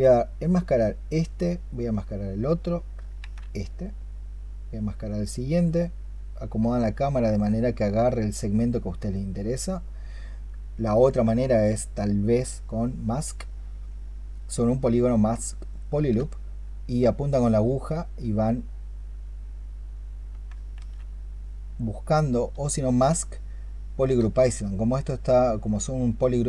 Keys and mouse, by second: 3.1 ctrl+z, 10.9 ctrl+click, 12.8-15.9 space, 20.6 ctrl+z, 22.5-23.9 space.